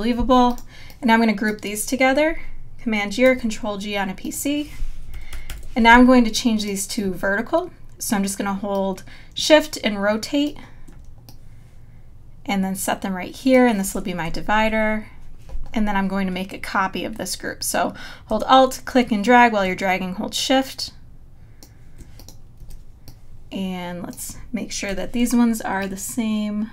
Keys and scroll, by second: 3.2 super+g, 5.6 super+-, 14.3 Left, 22.6 z, 24.9 v.